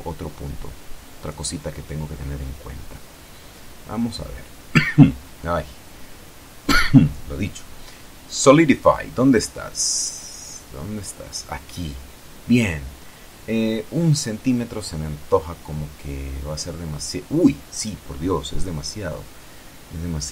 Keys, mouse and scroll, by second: 0.0-0.7 scroll up 2, 1.0 right click, 2.6 right click, 5.0 click, 5.9 click, 11.4 click, 14.7 F12.